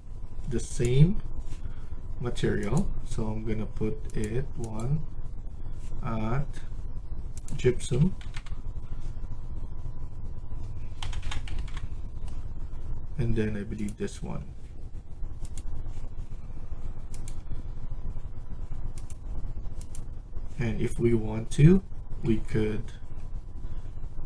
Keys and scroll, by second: 7.9-8.7 typing, 10.9-11.9 typing.